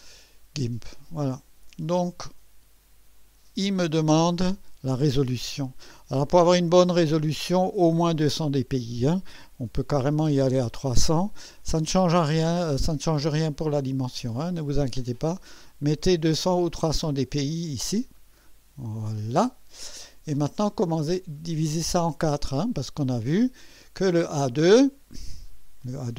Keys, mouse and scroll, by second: 0.6 click, 6.3 click, 10.0 0, 17.9 click, 23.6 click.